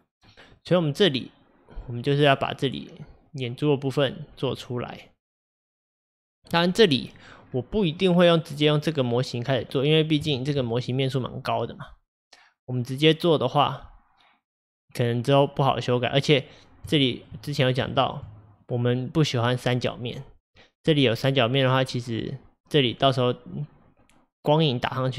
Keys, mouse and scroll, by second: 0.6-3.6 middle drag, 4.6-7.5 middle drag, 7.5-8.0 scroll down 3, 8.0-9.7 middle drag, 9.7-10.3 scroll up 3, 10.3-14.2 shift+middle drag, 16.1-17.6 middle drag, 17.6-18.0 scroll up 2, 18.0-21.0 shift+middle drag.